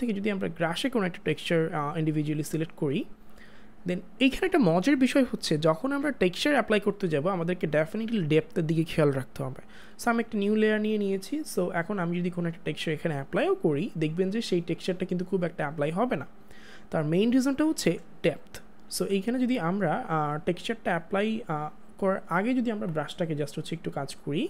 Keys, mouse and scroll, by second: 12.4 click, 18.6 click, 18.9 ctrl+z, 20.4 click.